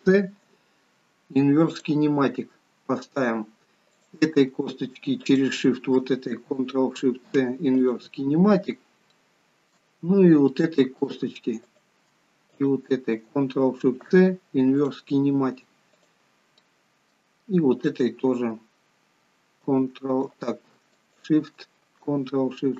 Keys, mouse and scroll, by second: 0.1 ctrl+shift+c, 4.0 click, 5.3 shift+click, 7.0 ctrl+shift+c, 8.6-9.1 scroll down 2, 9.2 shift+middle click, 10.5 middle click, 11.7 click, 12.6 shift+click, 13.8 ctrl+shift+c, 16.0 click, 16.7 middle click, 21.1 shift+click.